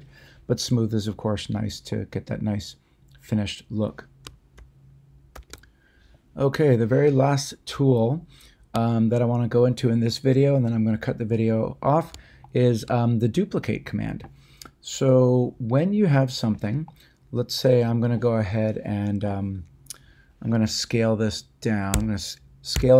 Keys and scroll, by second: 21.9 s, 22.7 z.